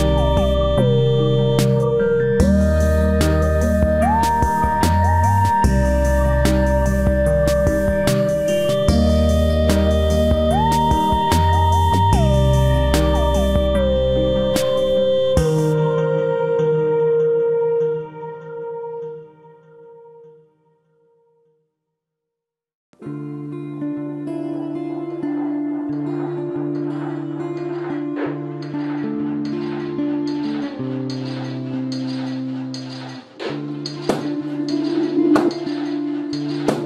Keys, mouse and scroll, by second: 0.8 right click, 1.4 KP_Decimal, 1.6 right click, 1.9 middle click, 2.6-3.9 middle drag, 2.9 g, 3.9-5.0 right drag, 4.5 g, 8.3 click, 9.0 g, 10.2 g, 11.4 g, 13.3 g, 16.3 g, 17.7 g, 20.1 g, 21.4 g, 22.9 g, 25.2-26.7 right drag, 25.4 g, 27.4-28.9 middle drag, 30.7-34.1 right drag, 30.9 g, 32.5 g, 36.7-36.8 right drag.